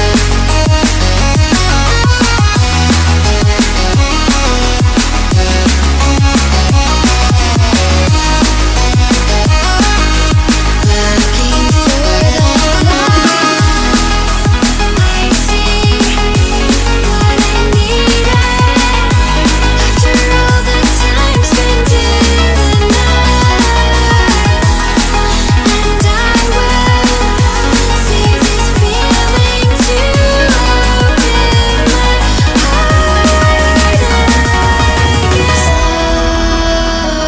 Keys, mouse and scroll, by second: 0.1 scroll up 2, 0.3 middle click, 0.8-2.1 drag, 2.1-3.6 middle drag, 3.6-3.9 scroll down 1, 3.9-4.5 scroll up 1, 4.5-5.6 drag, 5.6-6.2 scroll down 2, 6.2 scroll down 2, 6.2 click, 6.6 g, 8.4 click, 9.3 click, 10.0 click, 10.4 click, 10.8 click, 11.1 scroll up 3, 11.6 middle click, 12.5 click, 13.3 middle click, 13.8 click, 14.0 middle click, 14.3-15.7 drag, 15.7 shift+a, 19.8-21.6 drag, 21.8-24.4 drag, 24.5 middle click, 25.1 click, 25.7 click, 28.8-30.1 middle drag, 30.1 click, 30.4-32.9 drag, 33.0 click, 33.5 shift+a, 35.7 middle click, 36.3 click, 36.7-37.2 middle drag.